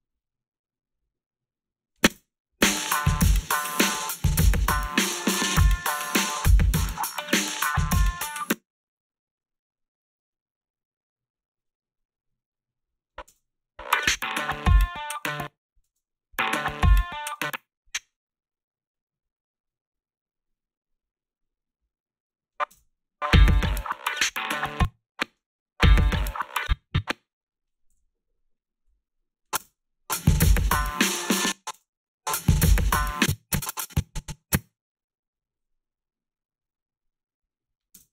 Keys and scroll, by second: 2.1 space, 4.0 r, 4.5 a, 8.3 space, 13.3 space, 15.2 space, 15.8 space, 17.3 space, 22.7 space, 24.6 space, 25.3 space, 26.4 space, 27.9 g, 29.6 space, 31.3 space, 31.8 space, 33.0 space, 38.0 space.